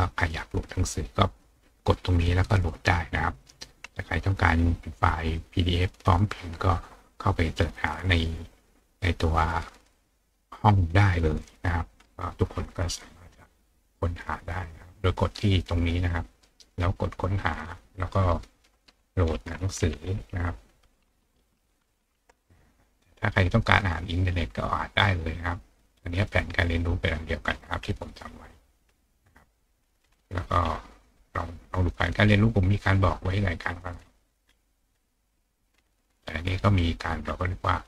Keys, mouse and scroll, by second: 11.4 click, 13.0-14.9 scroll up 4, 14.9 click, 16.7 click, 18.0 click, 26.9-27.4 scroll down 2, 27.4 scroll up 2, 27.5-27.8 scroll down 2, 28.2 scroll down 2, 28.7-30.1 scroll down 2, 30.1-31.6 scroll down 2, 31.6 scroll down 1, 32.7-33.1 scroll up 2, 33.1-34.5 scroll down 2, 34.5-36.0 scroll down 1, 36.0-37.1 scroll down 1, 37.1-37.8 scroll down 1.